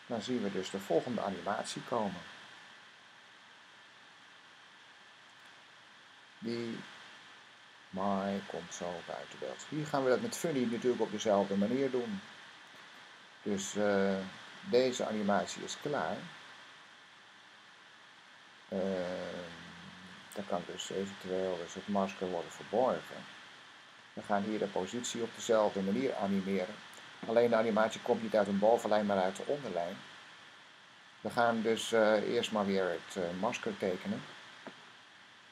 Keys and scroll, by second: 3.8 Right, 4.2 Right, 4.6 Right, 5.2 Right, 5.8 super+Right, 6.4 super+Right, 6.9 Right, 8.0 super+Right, 22.3 m, 25.2 p.